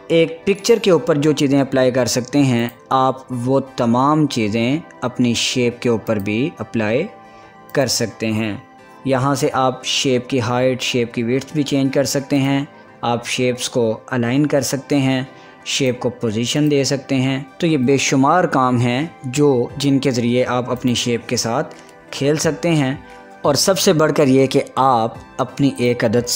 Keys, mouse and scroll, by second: 4.2 click, 7.8 click, 14.0 click, 17.4 click, 22.4 click.